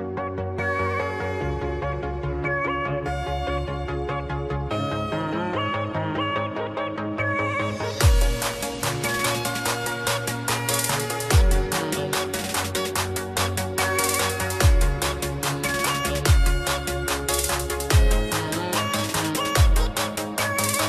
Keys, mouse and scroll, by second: 1.2 click, 2.3 click, 4.8 click, 6.5-6.8 scroll, 6.8 click, 7.6-8.0 scroll, 8.0 click, 11.6 click, 13.4 click, 14.4 click, 18.0 click, 19.2 click.